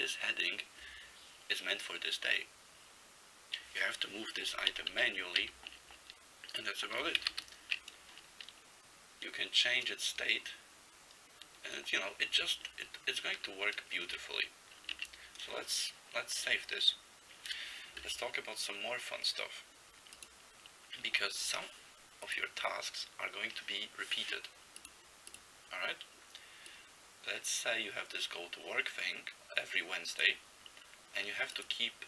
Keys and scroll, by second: 4.8 ctrl+n, 5.0 ctrl+n, 5.5 ctrl+n, 7.3 ctrl+c, 7.4 ctrl+t, 13.5 ctrl+g, 14.2 ctrl+x, 14.9 ctrl+s.